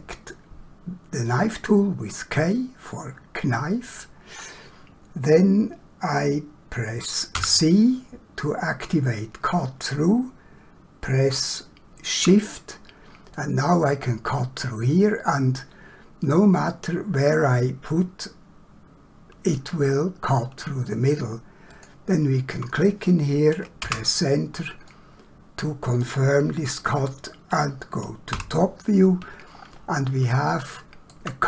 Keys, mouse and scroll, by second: 7.3 c, 13.3 shift+click, 23.9 Return, 24.9 middle click, 29.6 scroll up 1, 30.5 shift+middle click.